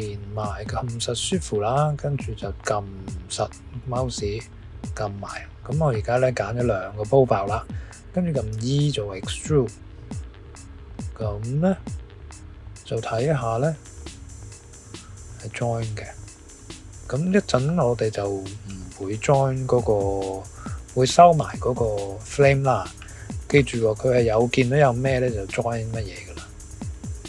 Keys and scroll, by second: 8.5 e.